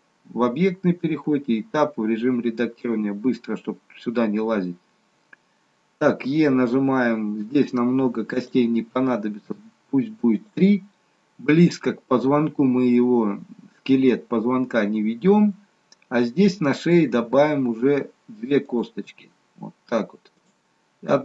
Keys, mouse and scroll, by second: 1.4 Tab, 6.4 e, 8.8 e, 17.3 e, 19.2 e.